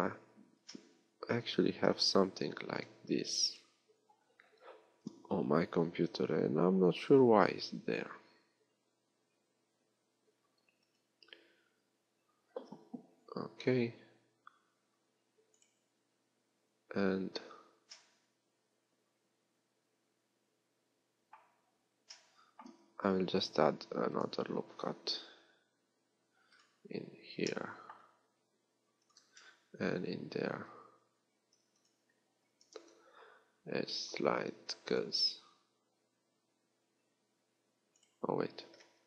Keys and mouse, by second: 2.0 middle click, 2.2 z, 2.8 b, 5.0 z, 18.2-23.6 middle drag, 23.6 ctrl+r, 28.8 ctrl+r, 32.9 ctrl+e.